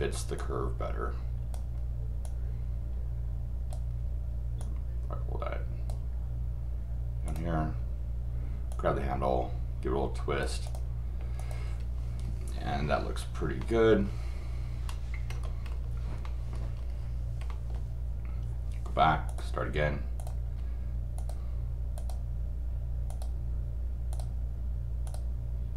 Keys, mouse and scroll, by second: 0.3-1.5 drag, 2.2-3.7 drag, 4.6-5.9 drag, 7.2 click, 8.7-10.4 drag, 10.6 click, 11.4 click, 12.1-12.4 scroll up 2, 13.6 middle click, 14.7 scroll down 2, 15.3-15.9 scroll up 4, 16.2 middle click, 16.5-16.9 scroll down 1, 17.5 middle click, 19.3 click, 20.2 click, 20.5 scroll down 1, 21.1 click, 22.0 click, 23.1 click, 24.1 click, 25.0 click.